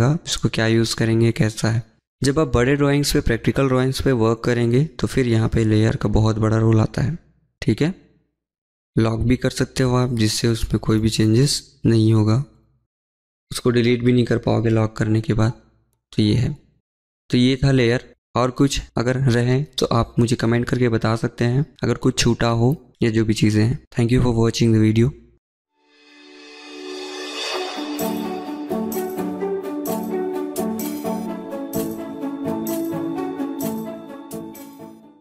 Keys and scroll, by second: 11.9 Delete, 12.1 Delete, 12.2 Delete, 12.3 Delete, 12.4 Delete, 13.5 Escape, 13.7 Escape, 17.2 Delete, 17.5 Delete, 18.8 Escape, 19.0 Escape, 19.1 Escape.